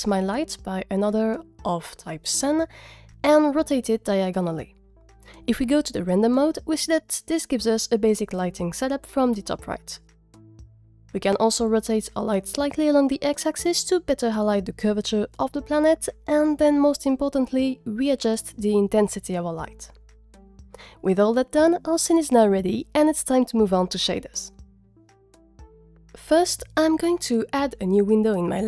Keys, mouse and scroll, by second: 0.5 click, 1.5 click, 1.8 middle click, 1.9 scroll up 3, 2.0 scroll down 3, 2.2 scroll down 4, 2.4 n, 2.9 shift+click, 3.2 middle drag, 3.5 r, 3.7 y, 3.9 shift+4, 3.9 shift+5, 4.1 Return, 5.7 click, 6.3 click, 11.3 click, 19.0-20.4 drag, 19.8 Left, 26.6 click, 27.0 click, 27.0-27.8 drag.